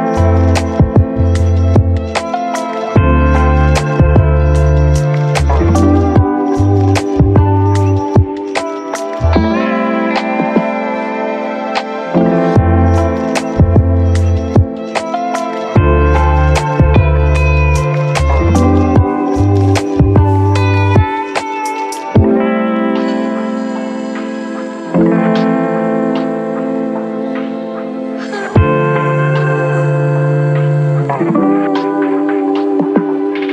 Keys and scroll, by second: 2.9-3.8 typing, 6.3-7.2 typing, 11.5-12.4 typing, 16.1-17.2 typing, 19.3-20.2 typing, 20.3 Return, 23.9 ctrl+z, 24.8 v, 29.4-30.2 typing, 31.8 v.